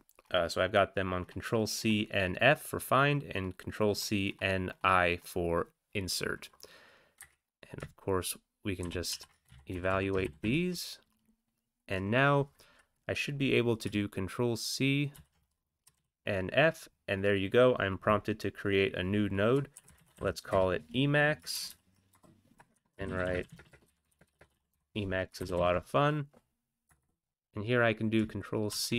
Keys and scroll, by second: 7.2 Up, 8.8 ctrl+x, 9.1 ctrl+e, 9.4 Down, 9.7 Right, 9.9 Right, 10.2 ctrl+x, 10.5 ctrl+e, 15.1 ctrl+c, 15.9 typing, 19.7-20.1 typing, 20.5 Return, 21.5 ctrl+c, 21.6 ctrl+c, 22.3 Return, 22.7-24.7 typing, 25.3 ctrl+x, 25.5 ctrl+s, 26.9 Return, 27.0 Return, 28.7 ctrl+c.